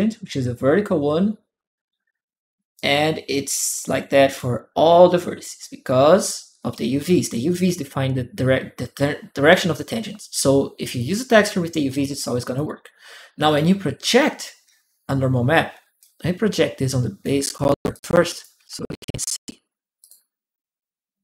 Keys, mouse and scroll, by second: 2.5 click, 3.6 click, 12.3 click, 13.2 click, 15.8-17.0 drag, 17.7 click, 19.8 click.